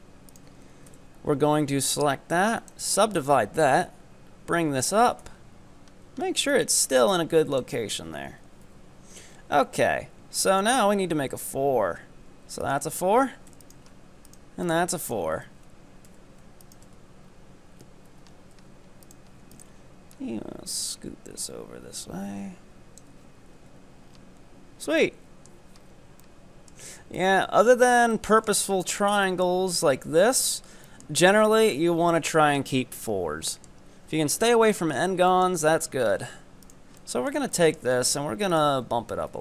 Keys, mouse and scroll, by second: 0.9 w, 3.2 right click, 3.8-5.2 drag, 5.2 KP_3, 6.5-7.8 drag, 7.8 scroll down 2, 8.0 z, 8.7 KP_7, 9.4-10.5 scroll up 3, 10.5-11.6 ctrl+right drag, 12.7 ctrl+right click, 13.5 f, 13.7 right click, 14.4 ctrl+right click, 14.7 ctrl+right drag, 15.1 ctrl+right click, 15.5 ctrl+z, 16.1 f, 16.7 right click, 16.9 Tab, 17.3-17.7 scroll down 2, 18.1 Tab, 18.3-18.7 scroll up 3, 18.7 z, 19.1 right click, 19.5 ctrl+right drag, 20.1-23.2 drag, 23.2 z, 23.7 Tab, 24.0 scroll down 5, 25.0-25.8 middle drag, 25.8 Tab, 25.9-26.3 scroll up 5, 26.3-26.7 middle drag, 26.7 Tab, 27.2-27.9 middle drag, 27.9 Tab, 28.2 middle click, 28.6-28.9 scroll down 3, 28.9-31.4 shift+middle drag, 31.4-32.4 scroll up 2, 32.4 Tab, 32.6-33.0 scroll down 3, 33.0-35.1 middle drag, 35.1 Tab, 35.4 middle click, 35.5-36.7 scroll up 9, 36.7 right click, 37.0-37.6 middle drag, 37.6 shift+scroll up 1, 37.6-38.6 shift+middle drag, 38.6 ctrl+right click, 38.9 scroll up 2, 39.3 g.